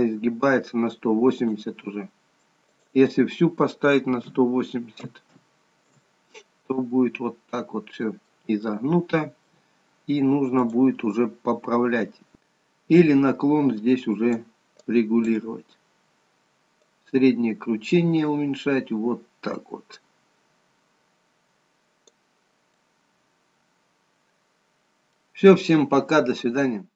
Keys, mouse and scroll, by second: 0.2 scroll down 1, 1.1 click, 1.1 scroll down 1, 3.0 click, 7.8 middle click, 9.0 middle click, 10.8 click, 15.1 click, 22.9 middle click.